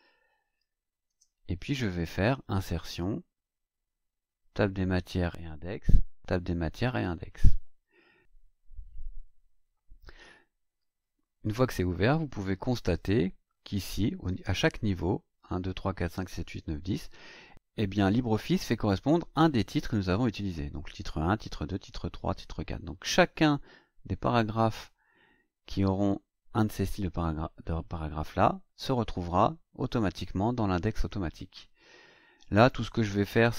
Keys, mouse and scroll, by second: 1.0 Return, 2.8 click, 6.7 click, 12.8 click, 32.4 click.